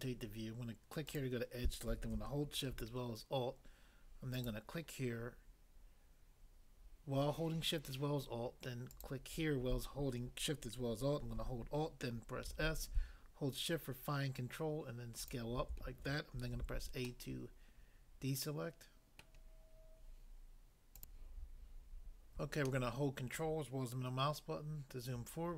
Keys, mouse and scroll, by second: 1.1 click, 1.2 click, 4.3 alt+click, 8.9 alt+click, 12.4 alt+s, 15.3 shift+click, 16.5 a, 17.1 middle click, 19.2 middle click, 20.9 click, 21.1 click, 22.7 ctrl+middle click.